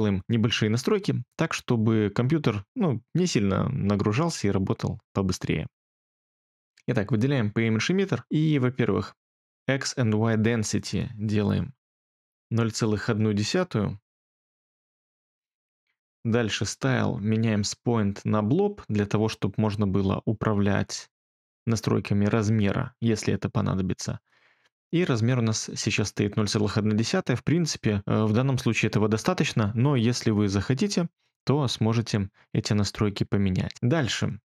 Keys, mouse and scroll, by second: 12.3-13.0 typing, 13.2 Return, 14.2 typing, 14.8 Return, 17.8-19.2 typing.